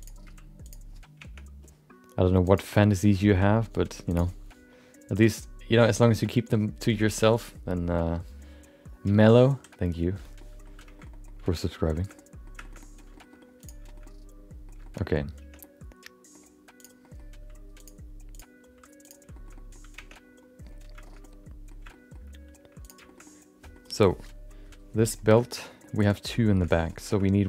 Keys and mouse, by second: 0.0 click, 0.2 g, 1.5 Tab, 10.3 middle click, 10.9 middle click, 11.1 middle click, 11.5 middle click, 11.7 middle click, 11.9 shift+middle click, 12.2 middle click, 12.6 shift+middle click, 12.8 middle click, 13.1 shift+middle click, 13.6 click, 14.0 middle click, 14.8 shift+middle click, 15.0 middle click, 15.4 Tab, 15.6 middle click, 16.8 click, 17.0 middle click, 17.3 g, 18.3 click, 18.6 g, 19.3 shift+middle click, 19.5 middle click, 20.2 Tab, 21.0 shift+middle click, 21.2 middle click, 21.9 shift+middle click, 23.2 middle click, 25.6 middle click, 25.9 shift+middle click, 26.1 middle click, 26.5 shift+middle click, 26.7 middle click, 27.0 shift+middle click, 27.2 middle click.